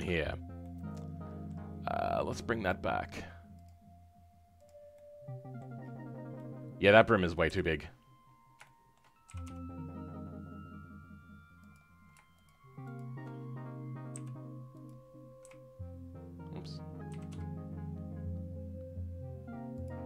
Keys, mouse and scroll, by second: 0.0 scroll down 3, 0.5-4.5 middle drag, 4.5 click, 4.9 middle click, 5.7-6.3 scroll down 10, 6.3-7.4 middle drag, 7.4 KP_7, 7.7-8.5 scroll up 11, 8.5 shift+middle click, 9.2 g, 12.4 shift+click, 12.9 shift+click, 14.8 ., 17.1 s.